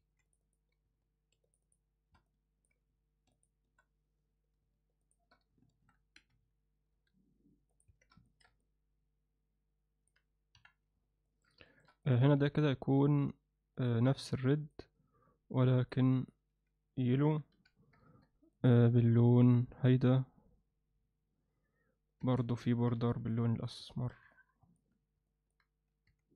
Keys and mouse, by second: 0.0 2, 0.2 click, 0.4 click, 1.6 shift+click, 2.3 alt+middle click, 3.3 shift+click, 5.0 shift+click, 5.8 shift+e, 7.9 Tab, 8.3 ctrl+alt+middle click, 8.6-10.1 alt+middle drag, 10.5 KP_1, 11.3 ctrl+alt+middle click, 11.7 alt+shift+middle click, 12.0 click, 12.4 z, 13.8-14.7 drag, 15.8 click, 16.2-18.2 drag, 18.5 click, 22.2 Tab, 22.9 z, 23.3 alt+middle click, 23.9 ctrl+alt+middle click, 24.3 alt+middle click, 25.3 alt+middle click, 26.1 3.